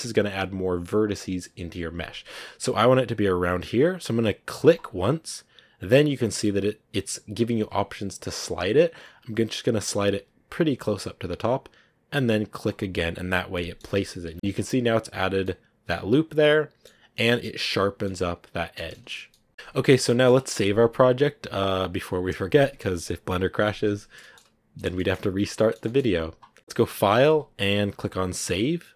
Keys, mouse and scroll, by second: 13.4 middle click, 14.3 a, 15.5-17.2 middle drag, 17.2 Tab, 17.3 middle click, 17.7 scroll down 6, 17.9-19.1 middle drag, 19.1 scroll down 2, 19.2 middle click, 19.9 scroll up 1, 19.9-22.0 middle drag, 22.0 click, 22.5-25.2 middle drag, 25.2 scroll up 1, 25.4-27.2 shift+middle drag, 27.2-28.9 drag.